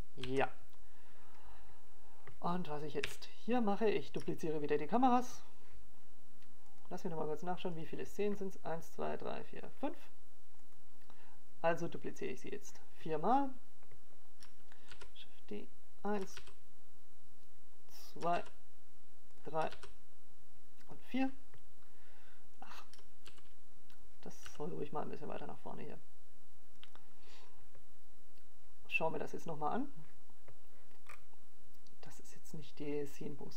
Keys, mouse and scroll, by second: 0.1 alt+a, 0.8 alt+a, 1.3 click, 1.6 alt+a, 8.0 KP_7, 9.4 shift+middle click, 11.6 click, 17.3 click, 20.0 shift+d, 21.2 click, 21.4 shift+d, 23.3 click, 23.5 shift+d, 24.5 click, 24.8 shift+d, 26.0 click, 27.7 right click, 28.4 g, 32.0 click.